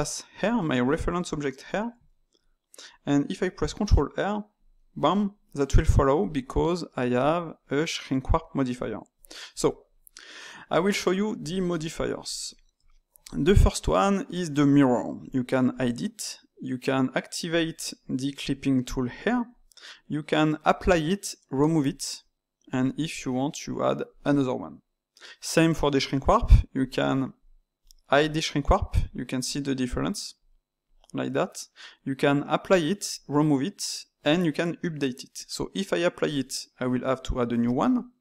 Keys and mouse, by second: 3.8 ctrl+r, 7.1 click, 9.5 click, 11.7-15.2 middle drag, 15.2 click, 15.7 click, 17.4 click, 19.1 click, 19.5-26.8 drag, 27.7 click, 28.1 click, 28.5 click, 29.0 click, 29.4 click, 29.9 click, 30.3 click, 30.8 click, 36.2-38.2 drag.